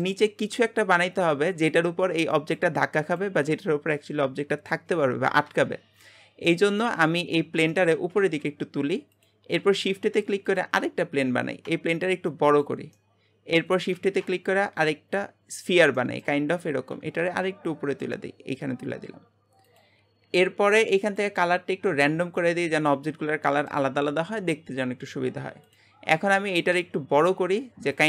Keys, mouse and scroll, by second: 6.5 middle click, 7.4 scroll down 1, 7.7 shift+middle click, 8.0 g, 9.6 shift+a, 11.0 scroll down 2, 11.7 s, 13.0 middle click, 13.9 shift+a, 16.0 middle click, 16.4-16.9 scroll up 1, 16.9 g, 21.0-23.5 drag, 23.5-25.6 middle drag, 25.6 click, 26.0-26.7 scroll down 1, 26.7 s.